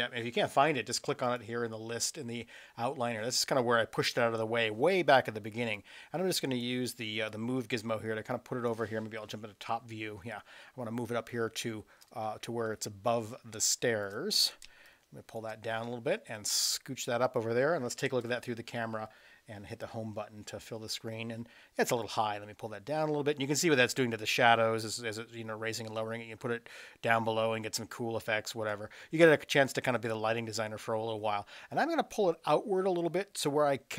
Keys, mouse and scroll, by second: 5.8-6.6 drag, 7.3-8.7 drag, 9.3 KP_7, 10.4 click, 12.1 space, 14.0 click, 14.0 space, 14.7 space, 16.4-17.4 drag, 18.0 KP_0, 20.1 Home, 22.0-28.7 drag, 29.7-33.9 drag.